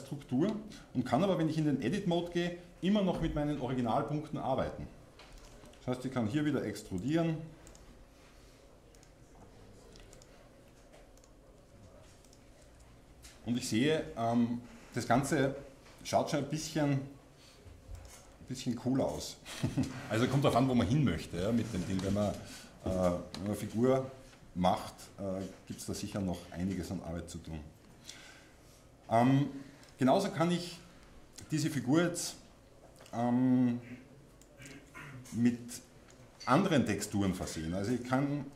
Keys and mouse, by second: 1.9 Tab, 5.5-7.1 drag, 6.3 e, 7.1 middle click, 7.2 e, 7.7-10.2 drag, 10.2 e, 11.7 e, 12.8 Tab, 13.1-14.8 drag, 15.8-17.2 drag, 16.3 g, 18.1-19.5 drag, 19.0 Escape, 19.7 click, 28.4-31.7 drag, 34.4-38.5 drag.